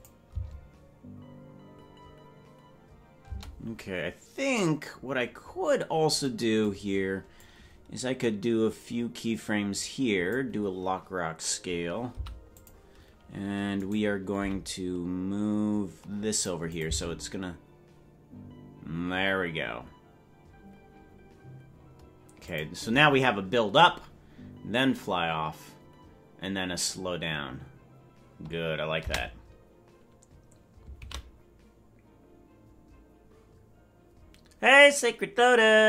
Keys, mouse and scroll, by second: 0.0 click, 0.0 c, 0.0 g, 0.3 space, 3.3 space, 5.4-6.2 scroll up 3, 6.2-7.4 scroll up 2, 7.4-10.4 drag, 12.1 i, 13.8 right click, 14.3 g, 16.7 click, 16.9 space, 22.5 click.